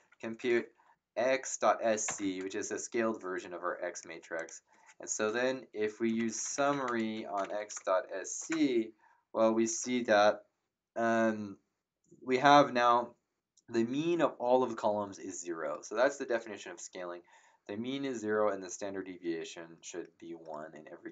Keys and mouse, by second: 0.0-0.4 typing, 2.0 ctrl+Return, 4.3 click, 5.8-8.2 typing, 8.3 Return.